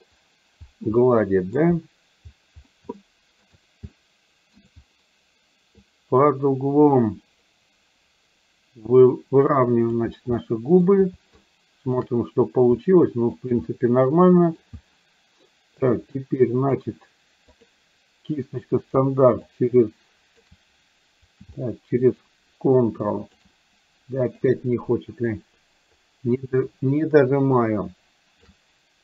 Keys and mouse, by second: 1.0 middle click, 3.0 shift+middle click, 4.0 shift+middle click, 5.8-10.0 drag, 10.5 middle click, 11.4 shift+middle click, 12.9 middle click, 13.6-14.6 middle drag, 15.9 click, 17.6 click, 19.5-20.5 ctrl+drag, 22.4-23.5 ctrl+drag, 24.5 click, 25.3-28.5 ctrl+drag.